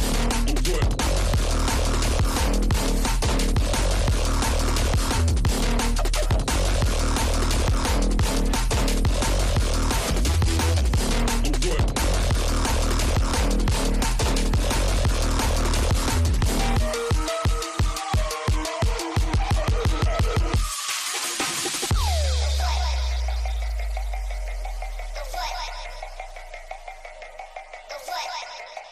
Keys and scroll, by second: 6.5 space, 13.1 space, 13.4 F3, 13.7 Escape, 22.8 space.